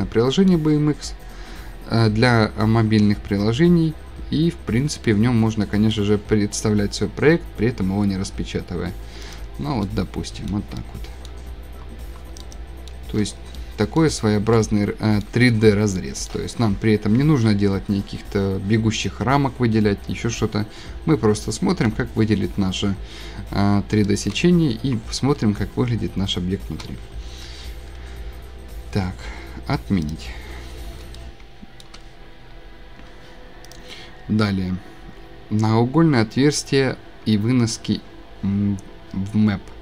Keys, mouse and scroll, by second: 0.4 scroll, 3.0-4.1 shift+middle drag, 4.1-5.5 middle drag, 9.3 click, 10.0-10.6 scroll, 10.0-12.8 shift+middle click, 11.2-12.3 shift+scroll, 12.1 middle click, 12.4 shift+middle click, 12.5 shift+click, 12.8 shift+click, 12.9-13.5 shift+scroll, 13.9 shift+scroll, 14.4 shift+middle click, 14.8 shift+middle click, 14.9-15.2 shift+scroll, 15.6 middle click, 15.7 shift+scroll, 20.0 scroll, 21.2 click, 21.4 click, 21.6 click, 21.9 click, 22.0 scroll, 23.6-25.0 scroll, 26.8 shift+click, 26.8 click, 27.2 scroll, 30.1 click, 30.6-31.0 scroll, 31.8 shift+scroll, 33.7 click, 34.3 scroll, 35.8 scroll, 36.8 scroll down 5, 39.4 scroll.